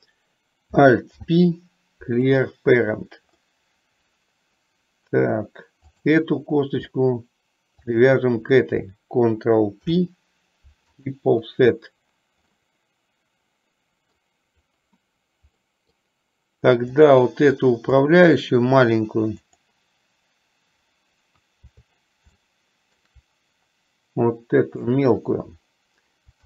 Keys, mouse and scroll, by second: 1.2 alt+p, 3.6-5.0 middle drag, 5.1 middle click, 6.0 click, 8.0 shift+click, 10.0 ctrl+p, 12.7-14.4 middle drag, 15.7 middle click, 17.0 click, 18.2 middle click, 19.6 click, 22.7 shift+middle click, 24.9 click.